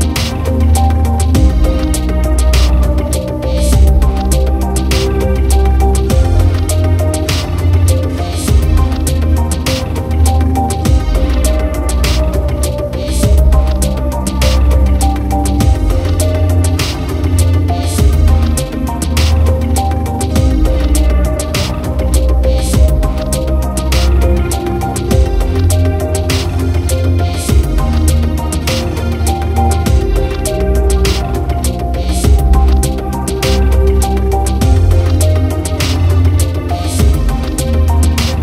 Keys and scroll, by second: 2.2 ctrl+j.